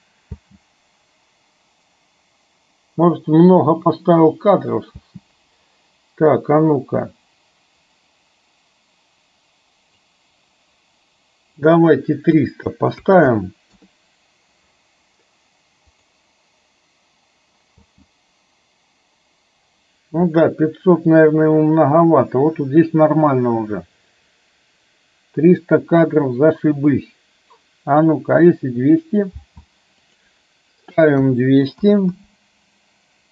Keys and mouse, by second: 0.4 space, 5.0 space, 7.9-9.9 drag, 11.6 click, 13.3 KP_0, 16.0 click, 16.4 click, 17.9 space, 29.4 space, 30.2-33.3 drag, 32.2 KP_0.